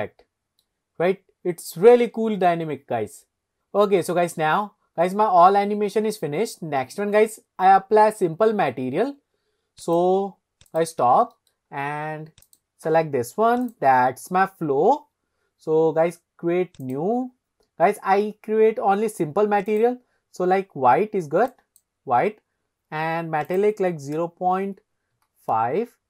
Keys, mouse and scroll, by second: 9.9 click, 10.7 click, 11.3 middle click, 11.7-12.5 scroll down 2, 12.5 drag, 13.7 click, 16.8-18.2 drag, 19.7 click, 23.5-25.7 drag.